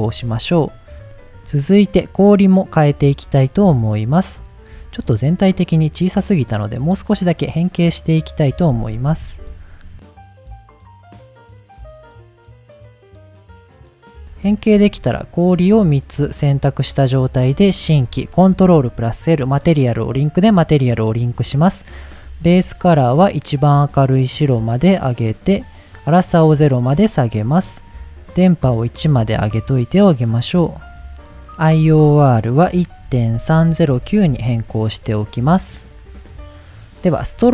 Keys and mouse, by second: 0.7 middle click, 1.0-1.4 shift+middle drag, 2.3 click, 2.7 click, 4.2 shift+click, 4.9 click, 5.6 click, 5.9 click, 6.6 click, 7.3 click, 7.9 click, 9.1 KP_1, 10.0 shift+middle click, 10.3 s, 10.5 click, 11.0 click, 11.0 g, 11.1 click, 11.8 click, 12.1 click, 12.1 g, 12.2 click, 12.8 click, 12.8 s, 13.2 click, 13.2 g, 13.7 shift+click, 14.0 click, 14.4 shift+drag, 15.8 ctrl+drag, 17.4 click, 18.7 ctrl+l, 21.9 click, 23.5 drag, 25.0 drag, 26.4 click, 28.8 click, 30.5 click, 31.7-34.9 drag.